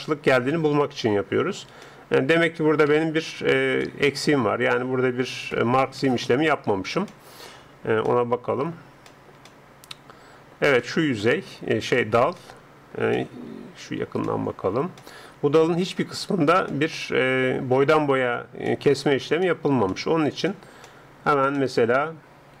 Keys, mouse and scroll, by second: 1.0-6.1 middle drag, 2.9 a, 6.1 ctrl+Up, 7.1-18.5 middle drag, 18.7-22.6 middle drag.